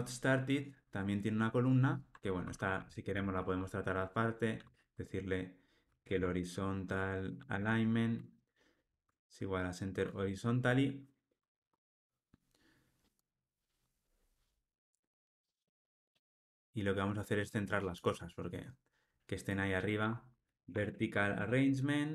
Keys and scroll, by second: 7.6 Return, 9.0 Return, 13.2 ctrl+r, 21.4 Return.